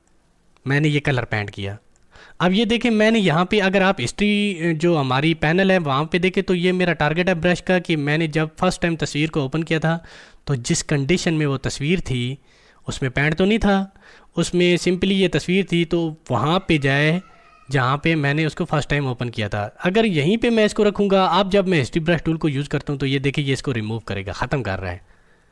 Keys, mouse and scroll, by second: 0.0-5.1 drag, 22.1-25.5 drag.